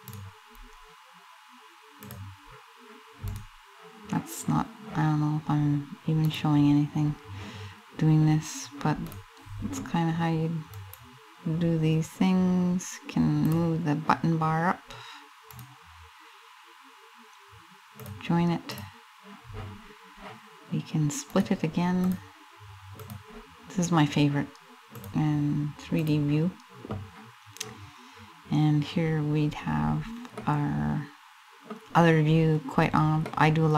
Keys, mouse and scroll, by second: 25.6 click.